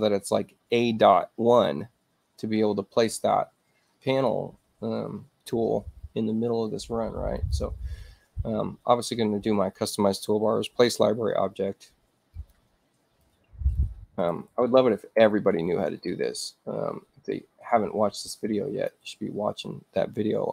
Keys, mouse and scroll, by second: 4.1 right click, 7.4 click, 12.4 click, 13.1-15.3 typing, 17.2 click, 18.3 click.